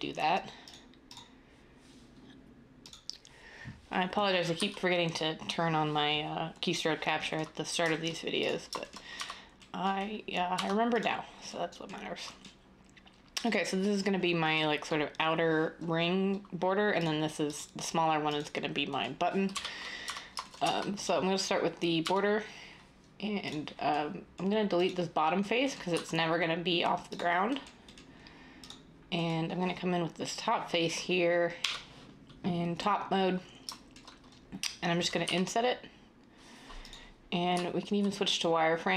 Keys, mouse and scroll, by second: 2.8 f, 4.5 d, 9.1 Tab, 10.5 Tab, 19.5 7, 20.0 Tab, 20.5 Tab, 21.9 Tab, 25.9 x, 31.5 7, 35.1 i, 37.5 z.